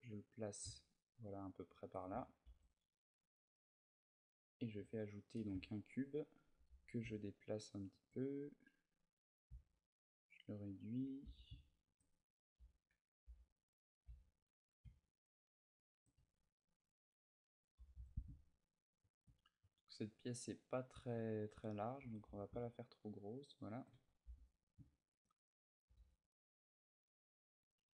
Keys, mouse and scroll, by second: 0.0 click, 1.0 KP_3, 2.3 shift+a, 4.6 shift+middle click, 5.4 ctrl+middle click, 6.2 g, 7.8 shift+click, 9.3 s, 10.6 click, 10.8 g, 11.7 shift+click, 11.9 Tab, 12.4 z, 12.6 a, 13.0 b, 15.6 shift+click, 15.9 a, 16.2 b, 17.5 g, 18.8 shift+click, 20.9 click, 21.7 g, 23.5 shift+click, 23.7 a, 24.0 b, 24.7 shift+middle click, 25.6 g, 27.3 click, 27.6 a.